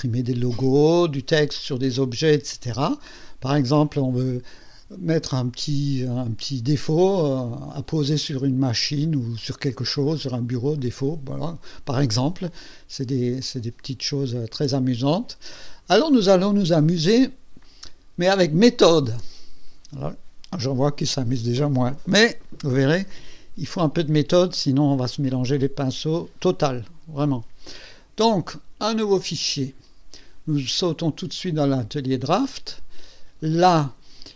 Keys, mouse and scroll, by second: 3.5 click, 4.0 click, 4.6-7.0 drag, 7.0-8.8 drag, 9.4 click, 10.3 click, 13.8 click, 26.5 click, 29.0 click, 31.4 click, 32.4 click, 32.9 click.